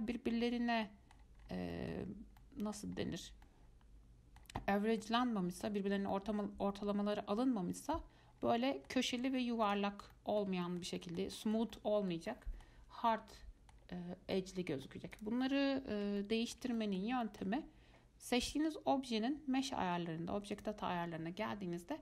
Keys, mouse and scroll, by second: 1.4 scroll down 1, 1.6-1.9 scroll up 4, 1.9 middle click, 2.1-2.6 scroll down 2, 2.6 middle click, 3.2-3.7 scroll up 1, 3.7-4.9 middle drag, 4.9-5.2 scroll up 1, 5.2 middle click, 6.1 scroll down 1, 6.3-8.6 middle drag, 8.6 scroll down 2, 8.8 middle click, 9.4 Tab, 9.9 click, 10.2 scroll down 2, 10.3-14.2 middle drag, 14.2 scroll up 1, 14.6-15.3 middle drag, 15.3 click, 16.4-20.5 shift+middle drag, 20.7 click.